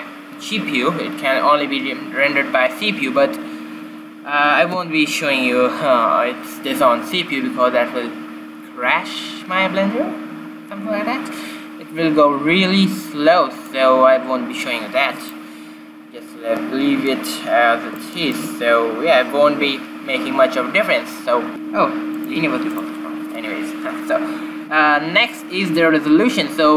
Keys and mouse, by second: 13.9-15.7 drag, 17.3-20.3 middle drag, 22.5-24.5 drag.